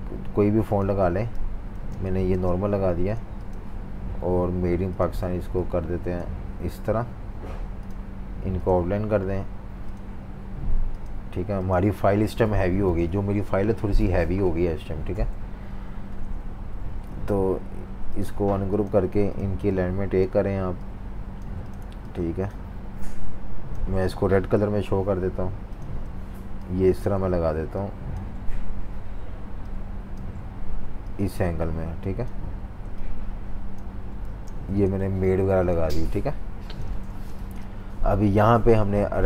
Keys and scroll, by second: 12.8 F18, 15.4 F19, 34.4 super+g, 35.0-37.7 typing.